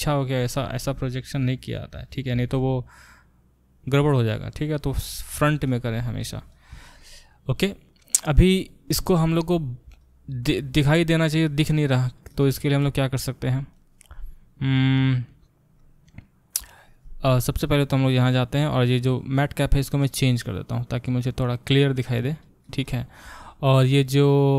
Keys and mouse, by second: 0.8 g, 5.1 ctrl+z, 6.0 g, 17.7-24.5 drag.